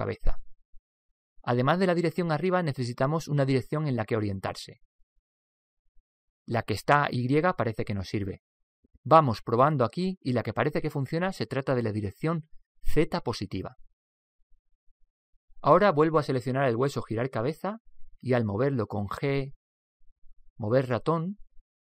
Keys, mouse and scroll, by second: 1.1 right click, 13.2 click, 16.9 right click, 19.6 g, 19.8 Escape, 19.8 g.